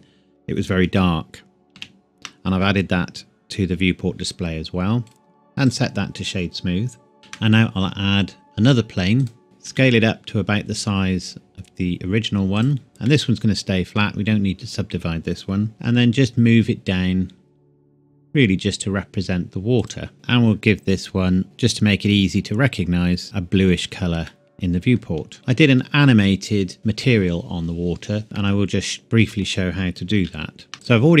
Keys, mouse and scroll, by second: 0.7 ctrl+Num_Lock, 0.7-1.2 scroll down 1, 1.8 ctrl+v, 5.1 right click, 5.7 click, 7.2 shift+a, 9.2 click, 9.4 scroll down 1, 9.7 s, 12.6 click, 13.1 middle click, 13.5 scroll up 1, 13.7 scroll down 1, 14.2-15.7 scroll up 1, 15.7 z, 19.8 click, 20.5 scroll down 1, 20.6 scroll up 1, 20.8-21.4 scroll down 1, 23.2 click, 24.3 middle click, 25.6 scroll up 1, 28.4 middle click, 30.3 ctrl+s, 30.7 middle click, 30.8 click.